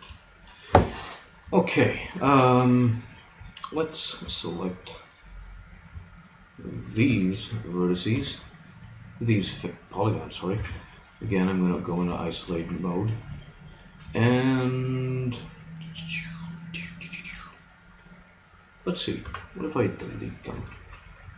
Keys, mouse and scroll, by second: 2.3 ctrl+Tab, 4.2 b, 7.2 b, 7.3 click, 8.2 b, 10.6 KP_Divide, 12.6 z, 16.4-18.0 middle drag, 19.2 x, 20.8 ctrl+Tab.